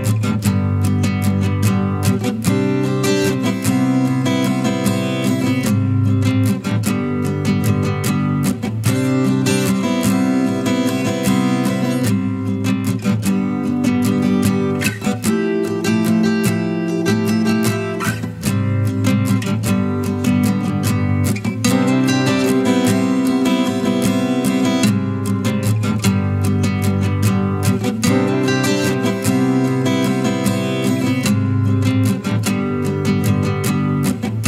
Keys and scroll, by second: 7.4 ctrl+t, 17.4 ctrl+t, 24.7 ctrl+t.